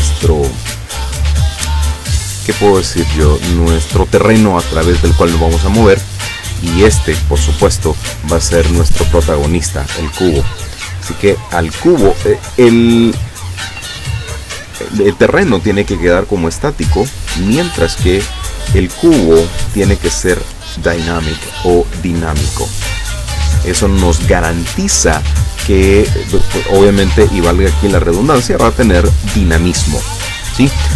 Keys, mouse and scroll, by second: 6.6 right click, 12.3 right click, 17.5 right click, 19.5 click, 22.4 click.